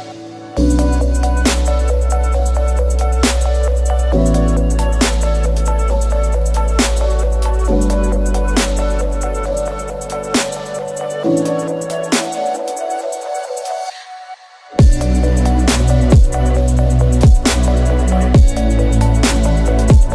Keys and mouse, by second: 2.8 a, 3.7 alt+click, 5.6 KP_1, 9.9 alt+shift+click, 10.4 shift+middle click, 11.6 alt+shift+click, 11.9 alt+shift+click, 12.3 ctrl+e, 12.8 a, 13.6 a, 14.0 u, 14.5 a, 15.8 click, 16.1 click, 17.0 ctrl+click, 17.4 ctrl+e, 17.9 a, 18.3 a, 18.6 u, 19.0 a, 19.6 middle click.